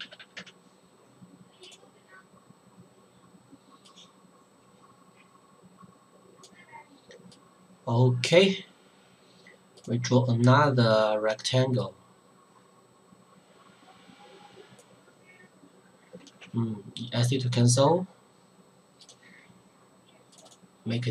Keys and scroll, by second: 0.0 KP_3.